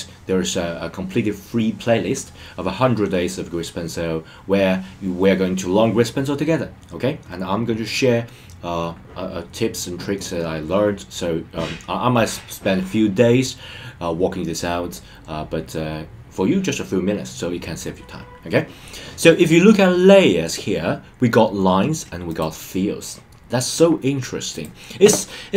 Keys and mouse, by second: 22.3 click, 24.5 click.